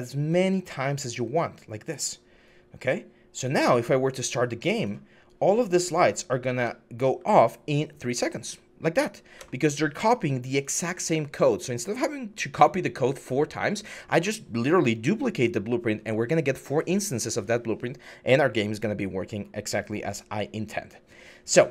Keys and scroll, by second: 6.4-6.9 typing, 9.1 Escape.